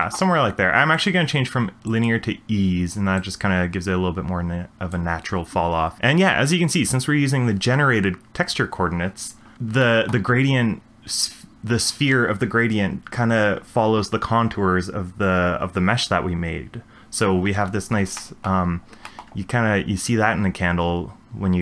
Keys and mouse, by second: 1.1 click, 3.2 click, 9.8 shift+middle drag, 18.2 shift+middle click, 19.1 shift+middle click.